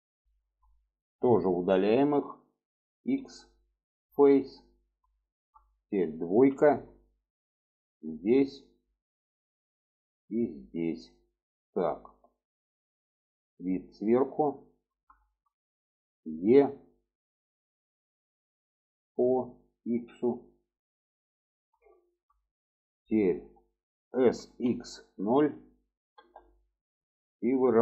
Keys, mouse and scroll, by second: 0.6 middle click, 3.0 x, 4.2 middle click, 5.0 shift+middle click, 6.2 2, 7.7 click, 8.1 middle click, 8.8 shift+middle click, 10.4 ctrl+click, 11.3-13.0 middle drag, 13.7-14.8 alt+middle drag, 15.1 shift+middle click, 16.2 e, 21.7 shift+middle click, 24.0 s, 27.2 shift+middle drag.